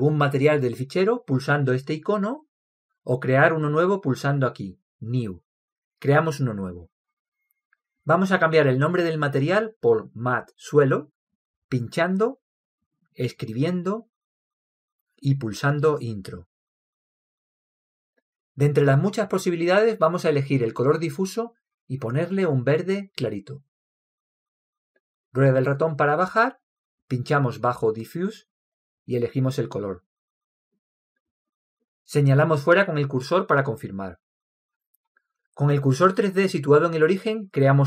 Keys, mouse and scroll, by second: 2.2-4.0 drag, 5.8-7.7 drag, 10.1-13.4 drag, 17.6-19.4 drag, 19.5-21.3 drag, 22.4-25.8 drag, 25.9 click, 29.5-31.5 drag.